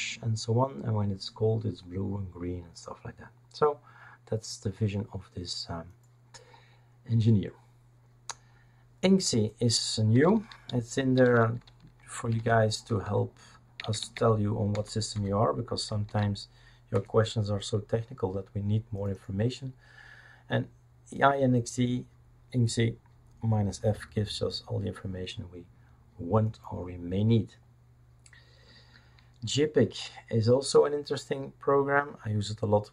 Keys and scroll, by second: 11.2 ctrl+alt+t, 12.0-16.0 typing, 16.9 Return, 17.7-18.4 typing.